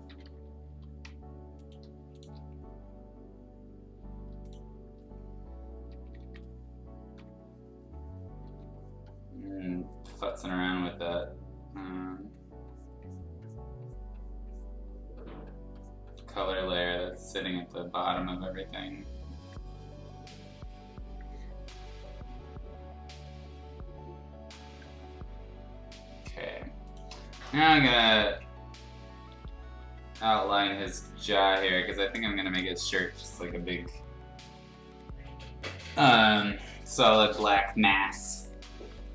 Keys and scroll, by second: 0.6 b, 4.9 ], 6.0 ], 6.2 ], 7.1 6, 8.4 ctrl+z, 18.1 ctrl+z, 28.5-31.2 typing, 32.1 ctrl+z, 32.5 space, 33.7 ], 33.8 ], 37.3 ].